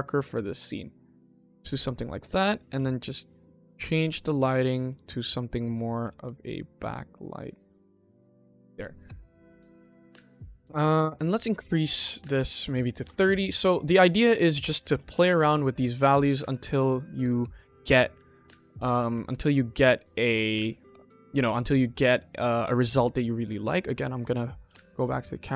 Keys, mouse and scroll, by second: 1.8 click, 2.0 click, 2.6 r, 4.9 click, 5.4 click, 5.9 r, 8.4 click, 9.2 click, 9.5 click, 10.1 click, 11.0 click, 11.8-12.9 drag, 13.7 click, 14.3 click, 15.9 click, 18.1 q, 20.9 n, 24.2 click, 24.9 scroll down 1.